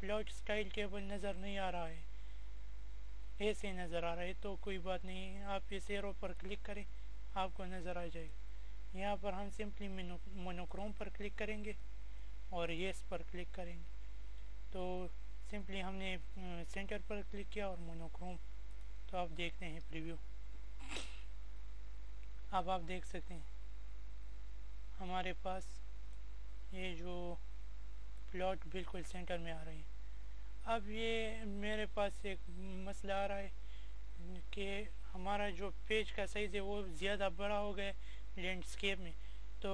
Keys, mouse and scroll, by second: 2.6 click, 7.0 click, 15.2 click, 19.4-24.5 drag, 24.5-27.3 drag.